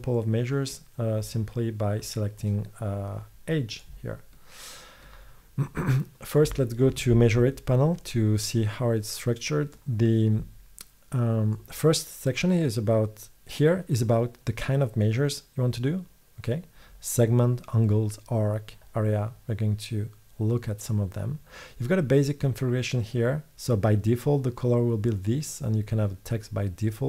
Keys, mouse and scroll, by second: 3.8-4.8 middle drag, 9.8 middle click, 10.0 middle click.